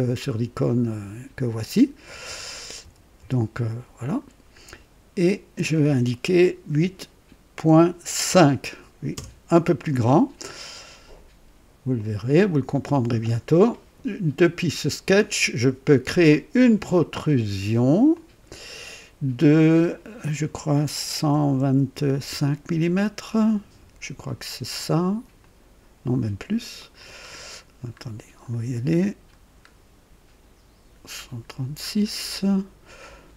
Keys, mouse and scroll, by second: 2.2-3.1 typing, 4.0 click, 6.7 KP_8, 7.6 KP_Decimal, 8.2 KP_5, 9.1 Return, 10.4 scroll up 1, 11.9 click, 18.1 click, 21.1 KP_1, 21.6 KP_2, 22.2 KP_5, 25.3 click, 26.7 click, 27.3-29.1 scroll up 4, 31.1 scroll up 1, 31.8-32.6 scroll up 2.